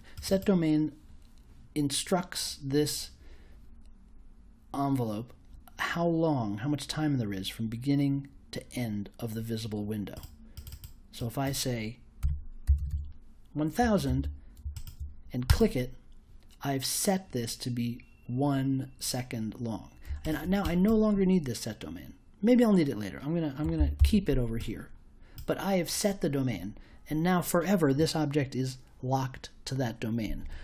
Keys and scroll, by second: 12.2 1, 12.6 0, 14.1 super+j, 23.7 super+x, 23.9 super+v.